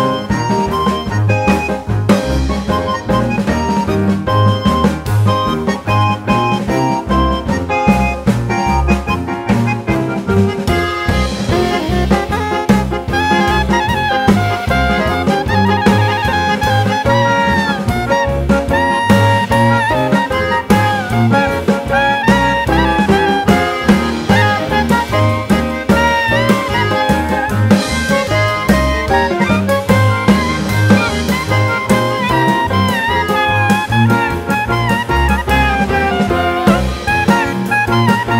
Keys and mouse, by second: 2.2-4.4 drag, 5.6 click, 6.5 click, 7.8 click, 9.2 click, 10.9 click, 12.4-13.1 drag, 14.6 click, 15.3 click, 15.4-18.6 drag, 19.6 click, 21.5 click, 23.1 click, 24.8-25.9 drag, 26.9 click, 28.6 click, 29.9-30.6 drag, 31.8 click, 32.8-34.0 drag, 35.4-37.1 drag, 37.7 click.